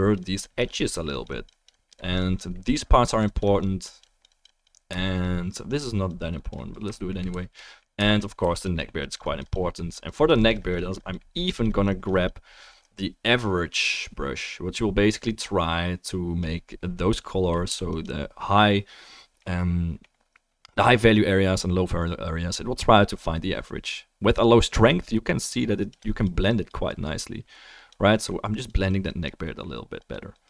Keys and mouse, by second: 2.5-5.6 middle drag, 5.4 click, 5.6 click, 8.4 click, 8.4 f, 8.9-11.4 drag, 17.7 f, 18.0 click, 23.1-29.5 drag, 25.3-28.6 middle drag, 25.3-28.6 right drag, 29.7 click.